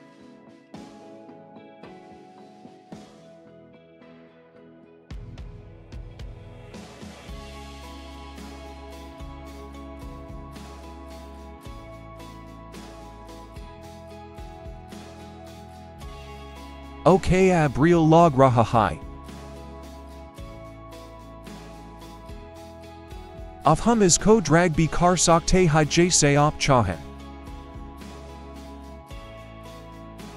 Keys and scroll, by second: 13.0 ctrl+-, 13.4 ctrl+-, 14.2 ctrl+=, 14.6 ctrl+=, 18.0 ctrl+-, 20.4 ctrl+0.